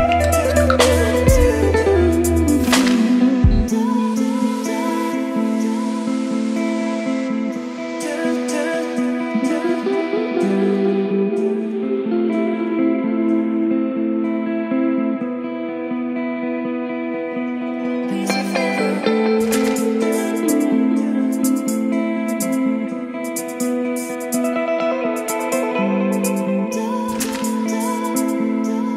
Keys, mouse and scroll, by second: 4.1 F5, 8.2-11.9 drag, 12.1 ctrl+c, 13.4 click, 13.9 Return, 14.9 click, 15.4 ctrl+v, 17.4-19.9 drag, 19.9 Return, 20.8-21.8 typing, 23.3-24.6 typing, 25.5 click, 26.2 Return, 27.1-28.4 typing.